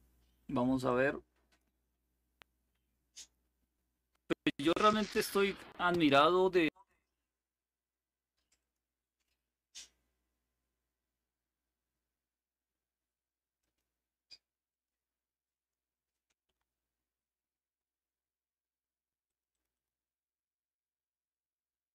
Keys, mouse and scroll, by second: 0.5-2.1 drag, 2.8 click, 6.4 click, 8.3 click, 13.3 click, 14.4 click, 15.3 click, 16.2 Delete, 19.0 click.